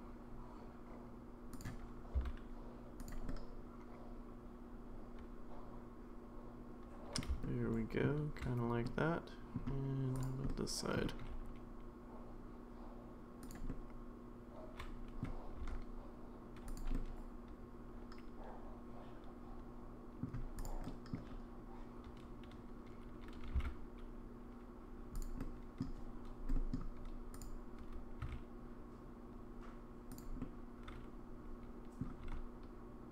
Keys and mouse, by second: 2.1 s, 3.3-7.2 middle drag, 7.4 shift+middle click, 8.9 middle click, 10.1 click, 10.5 middle click, 11.2 g, 13.7-15.2 middle drag, 15.6 r, 16.9-20.2 middle drag, 20.6 click, 20.8 middle click, 23.4 g, 25.4 middle click, 26.5 middle click, 27.4 click, 28.2 g, 30.4-32.0 middle drag, 32.2 g.